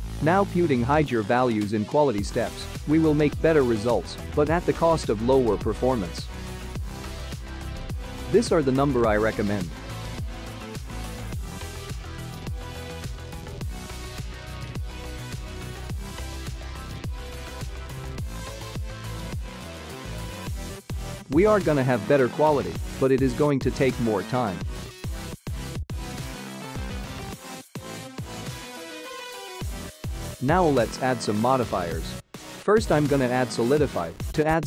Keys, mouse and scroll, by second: 1.1-2.0 scroll up 2, 2.0 click, 4.7-6.7 scroll down 16, 6.7-8.8 scroll down 6, 8.8 click, 9.3 click, 11.3-12.9 scroll up 15, 14.8 ctrl+s, 16.9 click, 20.0 space, 27.3 space, 28.9 click, 29.7 click, 31.4 click, 32.9 click, 33.7 click, 34.2 click.